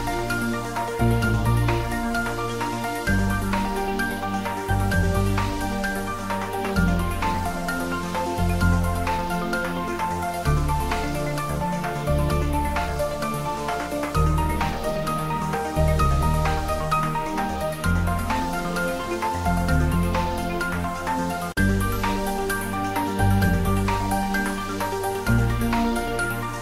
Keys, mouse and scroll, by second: 0.1 middle click, 1.0 s, 2.2 click, 2.6 ctrl+z, 3.0 Tab, 3.4 middle click, 4.2 ctrl+middle click, 4.8 Tab, 5.1 click, 6.0 2, 6.1 click, 7.0 g, 8.3 click, 8.5 Tab, 8.9 ctrl+a, 9.2 click, 10.0 ctrl+z, 10.9 click, 11.7 Tab, 12.5 ctrl+b, 14.5 click, 14.6 Tab, 14.9 shift+middle click, 15.4 ctrl+middle click, 15.6 middle click, 16.0 Tab, 16.3 middle click, 16.8 click, 17.2 middle click, 17.8 middle click, 18.3 ctrl+middle click, 19.1 shift+click, 19.4 middle click, 20.5 ctrl+b, 21.9-23.2 scroll down 1, 24.2 click, 24.5 middle click, 25.5 shift+middle click, 25.9 ctrl+middle click, 26.1 shift+middle click.